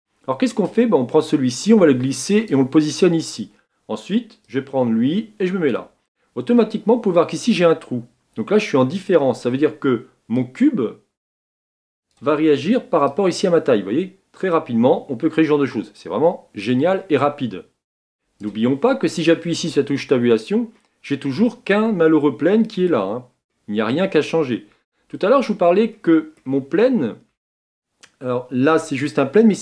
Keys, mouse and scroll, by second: 0.0-10.4 drag, 14.2-16.1 drag, 20.1 Tab, 20.8-24.4 middle drag, 24.4-25.1 scroll up 1, 25.1-25.9 scroll down 2, 25.9-29.6 middle drag.